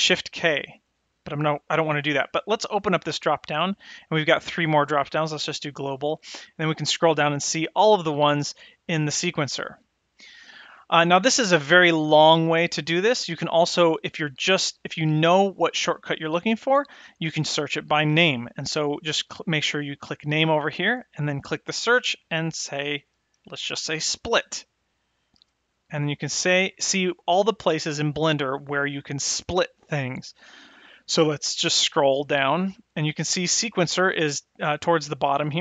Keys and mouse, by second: 2.7 click, 5.4 click, 14.2-15.5 drag, 20.9 click.